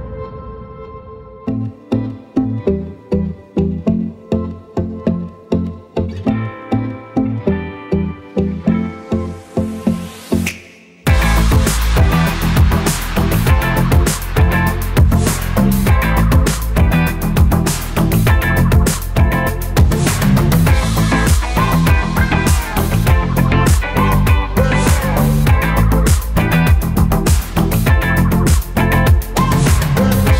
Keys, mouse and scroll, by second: 9.2 click, 27.6-27.9 alt+scroll down 1, 29.9 click.